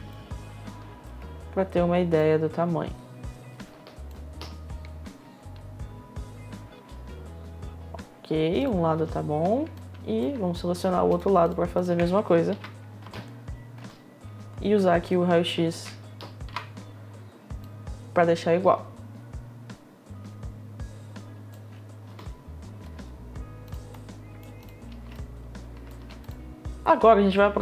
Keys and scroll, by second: 6.3 space, 8.6 space, 12.6 space, 17.2 r, 21.6 r, 21.7 space, 23.2 space.